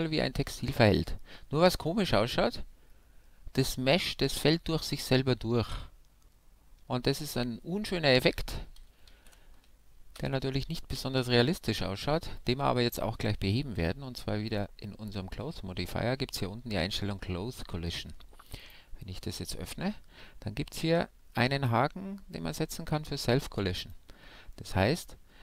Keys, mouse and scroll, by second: 0.8-2.6 middle drag, 9.2 alt+a, 10.1 shift+Left, 11.3-13.3 middle drag, 14.5-16.3 drag, 18.6-21.4 drag, 19.3-21.5 middle drag, 23.8-25.4 drag, 24.5-25.4 middle drag.